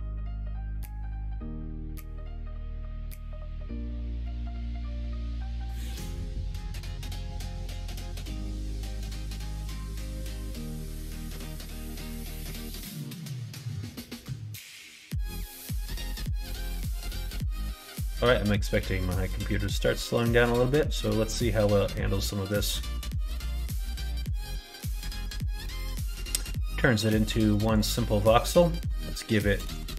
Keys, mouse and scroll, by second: 5.7-8.5 middle drag, 9.3 click, 9.8 Tab, 10.5 middle click, 11.6 Tab, 13.2-15.4 drag, 15.7 middle click, 16.4 middle click, 16.7 ctrl+s, 18.0 middle click, 19.1-25.5 drag, 27.7-29.9 drag, 29.7 KP_0.